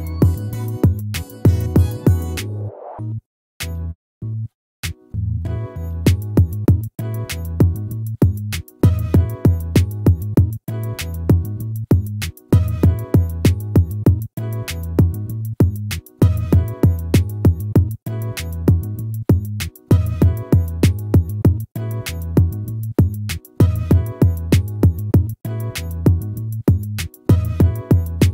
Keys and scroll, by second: 24.3 ctrl+z.